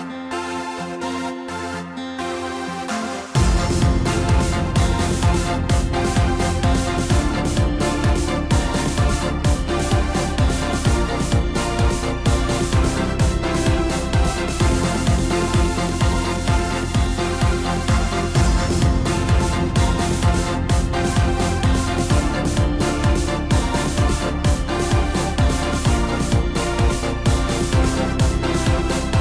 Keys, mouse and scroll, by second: 2.9 scroll up 1, 3.1 scroll down 1, 3.4-5.7 middle drag, 5.7 a, 6.2-7.3 scroll up 1, 7.3-7.6 scroll down 3, 7.6 middle click, 8.5-8.9 scroll up 1, 10.2 middle click, 10.9-11.7 scroll up 2, 11.7 e, 13.7-14.0 scroll up 1, 14.0 scroll down 3, 14.2-17.3 middle drag, 17.3-17.7 scroll down 1, 17.7-18.0 scroll up 3, 18.0-20.8 middle drag, 20.8 Tab, 21.6 scroll up 1, 21.9-22.2 scroll down 3, 22.2-23.1 middle drag, 23.1 click, 23.6 scroll up 2, 24.8 Tab, 25.9 click, 26.7-27.1 scroll down 1, 27.1-29.2 middle drag.